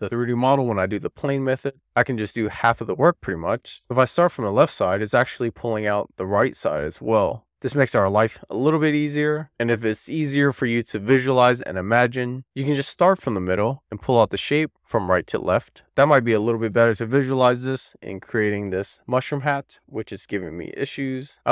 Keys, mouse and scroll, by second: 2.9 click, 4.1 middle click, 6.0 click, 6.2 middle click, 8.0-8.6 scroll up 3, 8.9 alt+shift+click, 10.1 alt+shift+click, 10.4 shift+middle click, 11.0 middle click, 12.3 click, 14.2 click, 15.2 alt+shift+click, 17.2 click, 18.0 click, 19.0-20.5 middle drag, 20.6 super+z, 21.2 click.